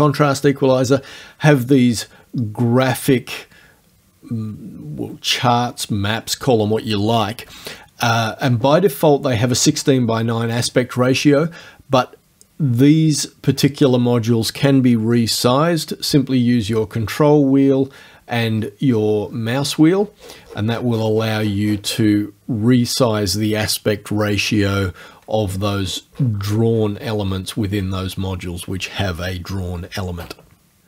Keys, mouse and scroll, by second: 17.1-17.5 ctrl+scroll up 1, 18.6 ctrl+scroll up 2, 19.6-20.2 ctrl+scroll up 3, 20.2-22.2 ctrl+scroll down 1, 25.4-26.1 ctrl+scroll up 2.